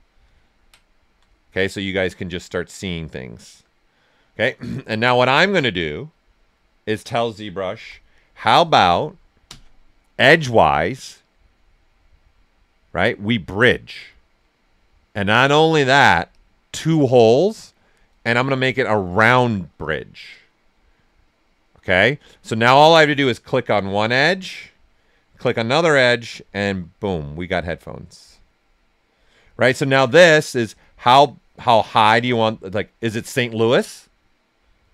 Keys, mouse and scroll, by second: 0.2 ctrl+right click, 1.4-3.1 right drag, 7.7 x, 9.4 space, 10.5 space, 16.2 space, 16.3 click, 16.4 space, 23.8 click, 24.3 right click, 25.5-34.9 drag.